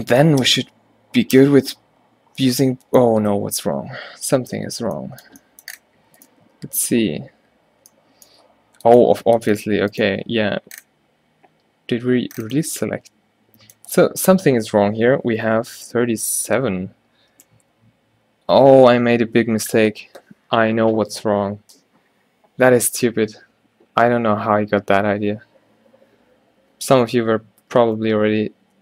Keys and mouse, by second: 0.5 space, 3.9 ctrl+z, 7.6 a, 17.6 Tab, 27.8 z, 28.1 z.